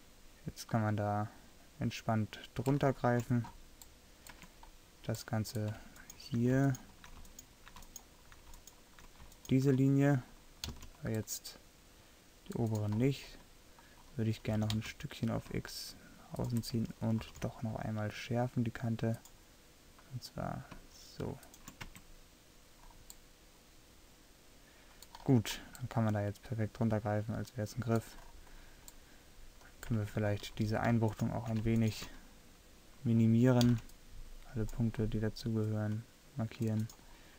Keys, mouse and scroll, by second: 4.5 Tab, 10.1-11.2 right drag, 10.8 c, 14.6 g, 17.3 ctrl+r, 22.0 Tab, 27.7-28.4 middle drag, 30.1 Tab, 33.8 c.